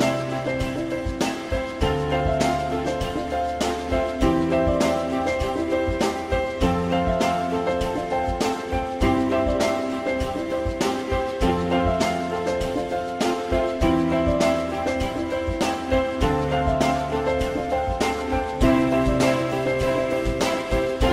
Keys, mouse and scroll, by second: 0.9 shift+click, 1.1 shift+click, 2.9 e, 5.8 click, 5.9 click, 13.0 e, 13.1 click, 14.5-15.9 drag, 16.1 w, 18.6 click.